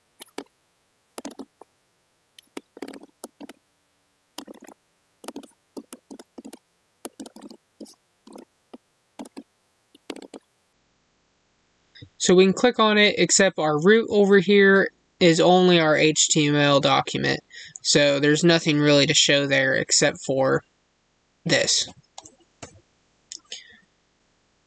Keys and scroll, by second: 4.3 space.